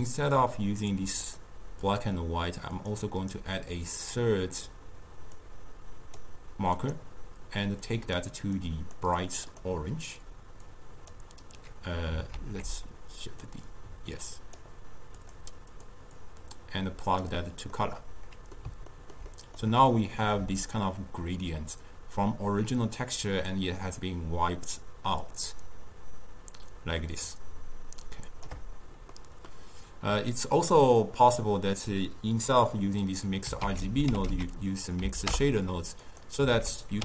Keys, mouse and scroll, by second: 9.5 click, 10.8-12.4 drag, 12.4 ctrl+z, 13.5-15.3 drag, 16.2-17.8 drag, 17.8-20.7 middle drag, 20.7-23.8 shift+drag, 29.2-32.3 middle drag, 33.7 ctrl+a, 36.6 ctrl+a.